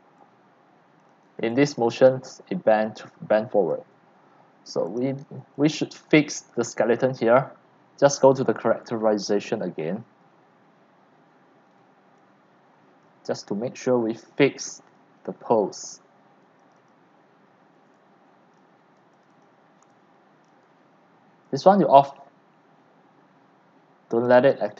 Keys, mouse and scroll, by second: 0.0-1.7 typing, 1.1 click, 2.1-5.8 drag, 5.5 x, 5.8 c, 6.2-10.4 drag, 10.5 right click, 10.7 right drag, 11.6 scroll, 12.1-13.0 c, 13.2 click, 13.4 scroll, 13.5 scroll, 14.0 c, 14.6 c, 14.9 drag, 15.2-15.9 scroll down 14, 16.7 right click, 16.9 right click, 17.9-18.6 c, 18.6 click, 19.1 right click, 19.4 click, 19.8 c, 20.5-22.6 drag, 20.5 c, 24.5 click.